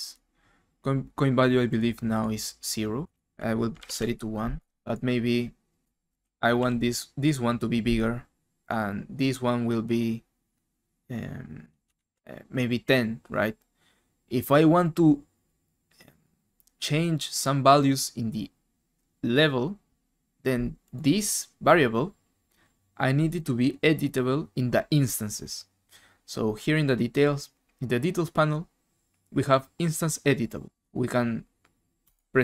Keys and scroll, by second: 3.7 typing, 3.8 Return, 5.9-6.7 typing, 11.9 alt+Tab.